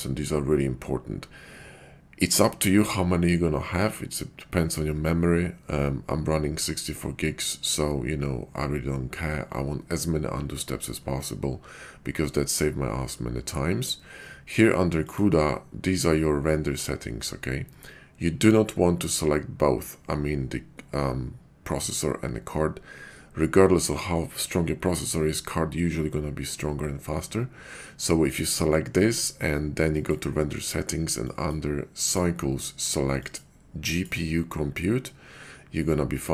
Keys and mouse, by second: 30.0 click, 31.2-32.0 drag, 33.2-34.0 drag.